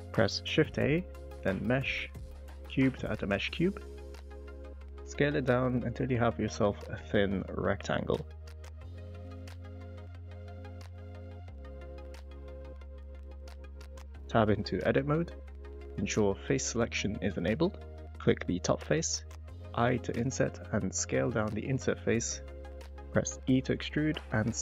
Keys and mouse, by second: 4.9 s, 5.2 z, 7.6 g, 7.7 z, 9.2 ctrl+z, 9.8 middle click, 10.4 y, 11.6 middle click, 12.0 middle click, 12.4 s, 12.6 z, 13.2 click, 13.6 middle click, 14.4 middle click, 15.0 shift+middle click, 15.3 middle click, 17.7 click, 18.0 click, 21.3 click, 24.2 e.